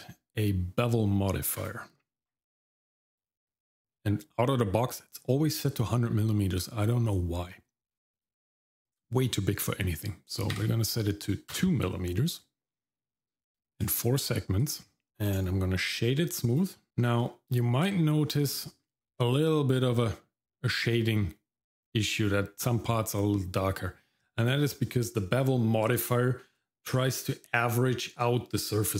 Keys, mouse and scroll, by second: 8.1-11.6 drag, 13.5 click, 13.7 click, 14.6 click, 15.1 scroll down 1, 15.2 click, 15.7 right click, 16.9 shift+middle click, 17.2 shift+middle click, 17.9 shift+middle click, 18.4 middle click.